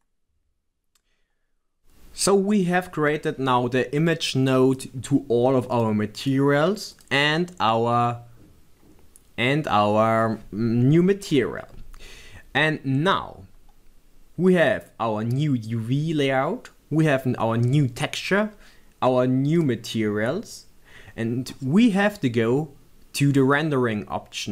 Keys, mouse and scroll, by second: 1.3-4.0 drag.